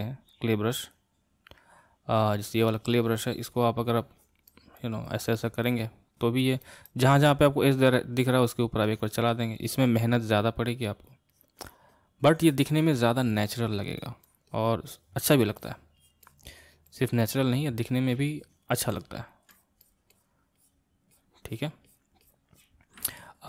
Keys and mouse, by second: 0.5-18.9 drag, 18.9 middle click, 19.5-23.0 drag, 23.0 middle click.